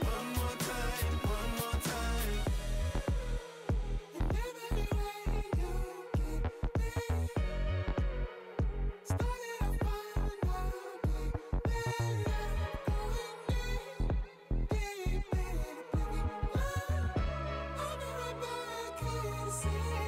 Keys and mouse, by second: 0.4 alt+shift+click, 1.2 alt+shift+click, 1.5 click, 2.9 alt+click, 3.6 click, 4.2 click, 5.0 alt+shift+click, 5.4 click, 5.9 Return, 7.1 click, 8.8 click, 10.0 alt+click, 12.5 click, 14.0 click, 16.3 click, 18.0 click, 19.1 click, 19.7 click.